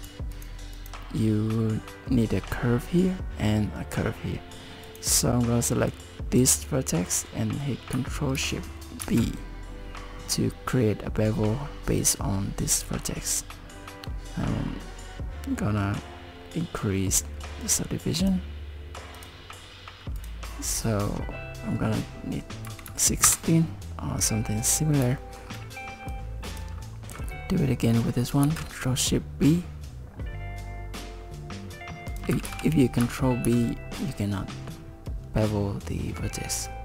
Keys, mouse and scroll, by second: 0.3 click, 0.8 click, 4.9 click, 5.9 click, 9.0 ctrl+shift+b, 19.3 click, 20.2 click, 25.2 shift+middle click, 26.1 click, 28.4 ctrl+shift+b, 32.4 ctrl+z, 33.5 ctrl+b.